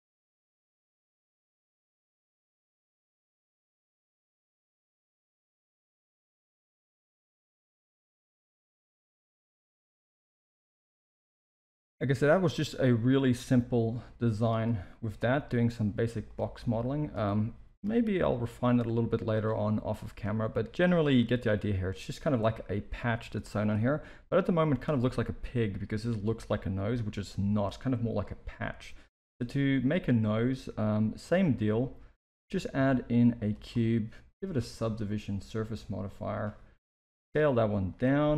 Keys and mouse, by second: 0.0 middle drag, 0.4 g, 0.7 alt+a, 0.8 middle click, 1.0 KP_1, 1.7 click, 1.9 Tab, 1.9 z, 2.1 click, 2.3 g, 3.4 click, 3.5-6.0 typing, 4.1 click, 4.9 click, 5.9 Tab, 6.2 alt+a, 6.7 Tab, 7.0 click, 7.2 g, 8.0 click, 8.1 g, 8.5 Tab, 9.2 Tab, 9.3 click, 9.5 g, 9.8 Tab, 11.8-14.3 middle drag, 15.2 Tab, 15.9 z, 16.6-17.1 drag, 17.2-17.7 middle drag, 18.2 g, 19.9 click, 20.3 g, 21.4 Tab, 22.4 KP_1, 22.9 z, 27.1 alt+a, 29.3 shift+a, 33.5 g, 34.7 click, 35.0-36.4 drag, 36.9 s, 38.2 middle drag.